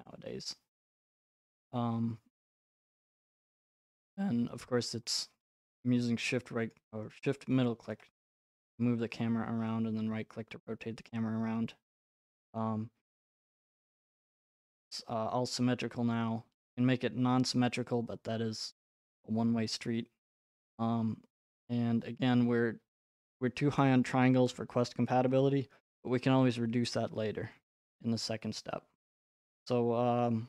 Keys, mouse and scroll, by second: 1.1 click, 1.9-2.5 scroll, 3.6 right click, 4.9 middle click, 6.7 shift+right click, 7.8 shift+middle click, 8.7 middle click, 8.9 middle click, 9.0 middle click, 16.7 right click, 22.2 right click, 30.3 right click.